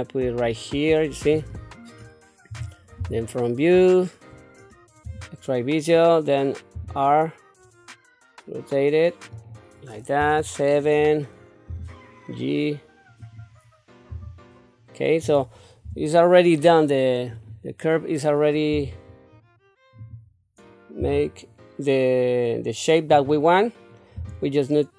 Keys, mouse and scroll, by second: 3.0 KP_1, 5.0 q, 6.7 r, 10.2 KP_7, 11.7 g, 14.1 q, 15.8 Tab, 17.3 click, 18.7 g, 21.0 r, 24.1 g.